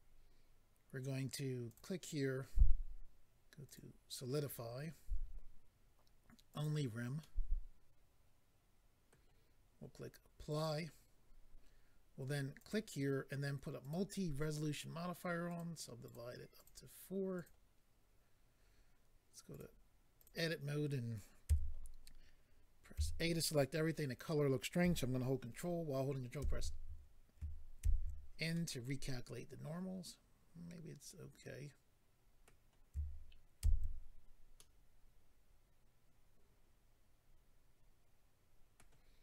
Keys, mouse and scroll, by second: 0.0 click, 1.7 click, 3.6 click, 3.8 click, 6.5 click, 6.6 click, 7.2 middle click, 10.5 click, 10.6 click, 12.6 click, 12.7 click, 13.8 click, 13.9 click, 15.5 click, 15.6 click, 16.0 click, 16.1 click, 16.5 click, 16.6 double click, 17.3 double click, 17.4 double click, 19.5 click, 19.6 click, 20.1 click, 20.2 click, 21.5 a, 26.4 ctrl+n, 27.8 ctrl+n, 28.5 middle click, 33.6 ctrl+n, 34.6 middle click.